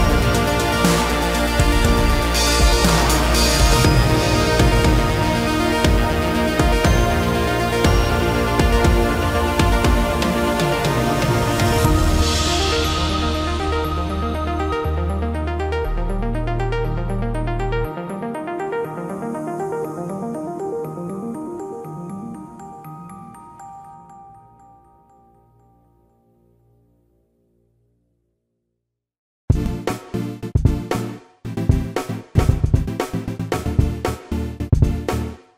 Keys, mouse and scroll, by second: 3.5 Delete, 11.1 ctrl+f, 29.5 Escape.